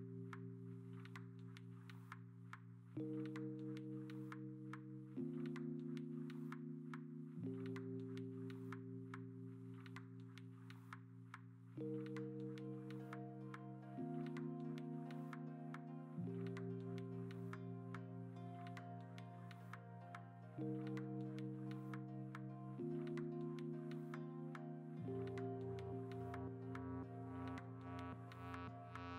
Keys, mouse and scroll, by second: 1.0 v, 1.5 v, 2.4 ctrl+a, 2.9 ctrl+t, 3.5 ctrl+d, 4.0 ctrl+d, 5.0-8.4 typing, 11.1 b, 11.9 ctrl+z, 12.8-14.5 typing, 16.6 ctrl+alt+g, 19.3 ctrl+alt+shift+e, 19.9 ctrl+shift+a, 25.7 ctrl+j.